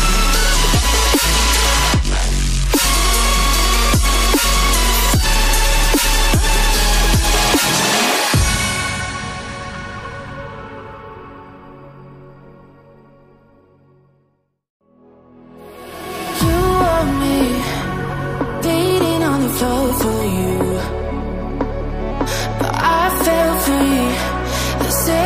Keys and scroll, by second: 0.1 Caps_Lock, 2.0 ], 8.3 ctrl+d.